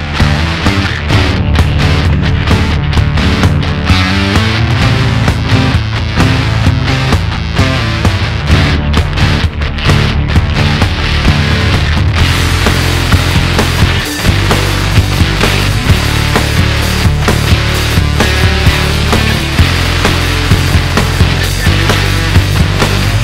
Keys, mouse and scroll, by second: 9.5 click, 10.2-12.6 drag, 13.6-16.8 drag, 21.3 click, 22.4 click.